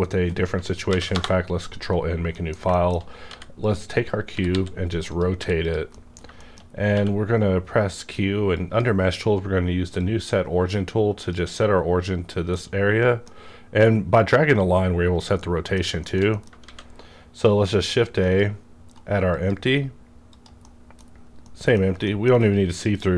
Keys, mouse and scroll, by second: 0.8 ctrl+n, 1.1 Return, 1.9 scroll down 1, 2.3 middle click, 2.4 middle click, 2.5 scroll down 1, 2.7 middle click, 3.1 scroll up 1, 3.2 g, 3.6 click, 3.9 scroll down 1, 4.3 r, 4.5 r, 5.1 click, 5.3 r, 5.6 click, 5.7 click, 5.9 middle click, 6.3 shift+middle click, 6.4 shift+middle click, 6.6-8.5 shift+scroll up 2, 6.9 q, 8.5 click, 9.9-12.6 drag, 12.3 scroll down 1, 12.6-16.0 middle drag, 15.8 scroll down 1, 16.3 shift+middle click, 16.6 shift+a, 18.2 click, 18.8 right click, 19.3 click, 20.3 click, 20.6 middle click, 21.5 middle click, 22.7 click.